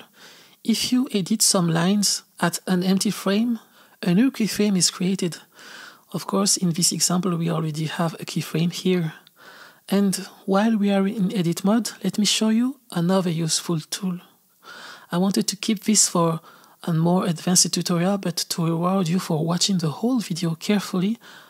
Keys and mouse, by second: 1.0 click, 2.6 g, 5.6 r, 9.3 g, 13.4 r.